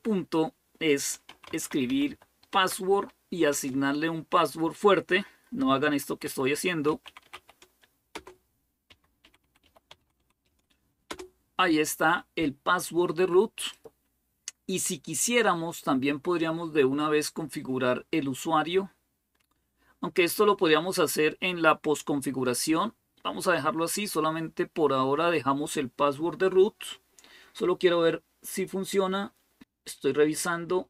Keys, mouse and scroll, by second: 0.8-2.4 typing, 3.3 Return, 5.2-10.8 typing, 7.9 Return, 10.9 Return, 12.7-13.4 typing, 13.5 click, 29.6-30.8 scroll down 1.